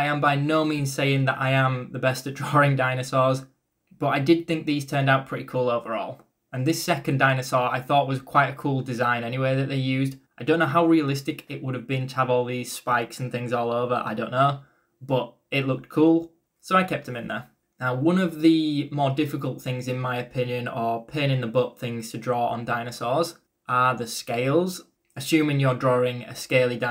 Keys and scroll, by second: 3.3-4.2 typing, 14.0 e, 14.3 b, 16.6-18.9 typing.